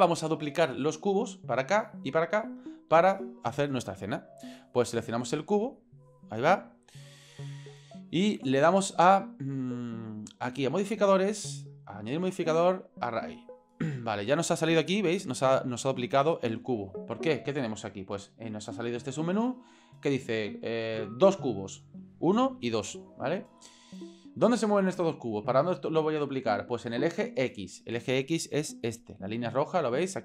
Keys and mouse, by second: 5.7 click, 10.8 click, 12.0-13.1 drag.